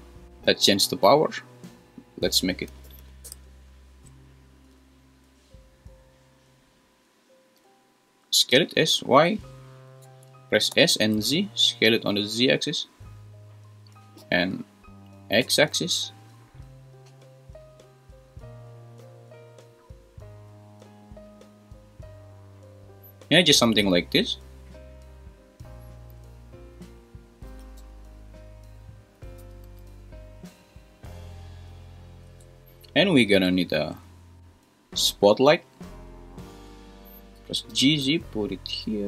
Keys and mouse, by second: 2.0-3.3 drag, 3.0 0, 8.5 s, 9.0 z, 10.0 Escape, 10.7 s, 11.0 z, 14.2 s, 15.4 x, 19.6 click, 21.5 click, 27.5 g, 27.8 z, 29.4 s, 29.6 z, 31.3 click, 33.5 shift+a, 37.4 g, 37.7 z.